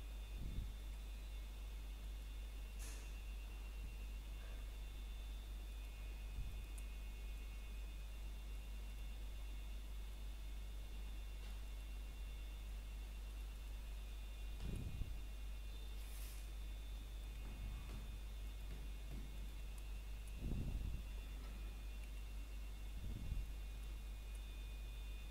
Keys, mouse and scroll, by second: 0.1 scroll up 1, 1.2 middle click, 1.6 scroll up 1, 1.8 shift+middle click, 2.2 scroll up 1, 4.4 click, 6.9 scroll down 1, 7.1 middle click, 7.4 scroll up 1, 8.9 middle click, 9.3-10.3 scroll up 1, 11.2 scroll down 1, 12.3 shift+middle click, 12.6 scroll up 1, 13.4 shift+middle click, 13.6 scroll up 1, 15.7 shift+middle click, 16.0 scroll up 1, 16.5 shift+middle click, 19.5 e, 21.8 click, 22.2 scroll down 1, 22.4 shift+middle click, 22.7 scroll up 1, 24.1 e.